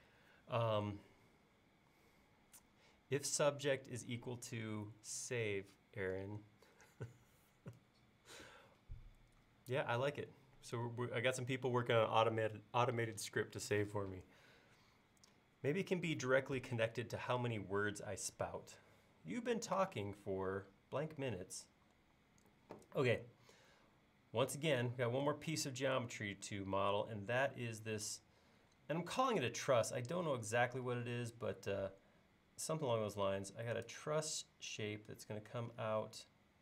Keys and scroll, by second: 30.9 l.